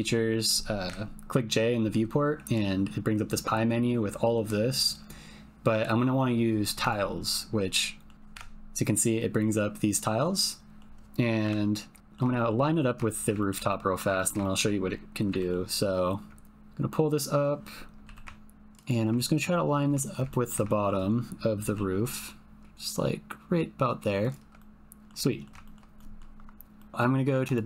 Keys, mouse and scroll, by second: 0.2 click, 0.8 j, 7.7 click, 9.1-10.8 drag, 12.0 alt+click, 12.3 shift+middle click, 12.6 ctrl+middle click, 13.0 shift+middle click, 13.3 ctrl+middle click, 13.4 ctrl+click, 13.6 shift+click, 14.1 ctrl+shift+click, 15.2 g, 18.0 g, 18.1 click, 18.8 ctrl+click, 19.2 click, 19.5 click, 20.0 click, 20.3 ctrl+click, 20.7 shift+click, 21.6 g, 24.7 middle click, 25.4 ctrl+click, 25.7 shift+click, 26.9 click.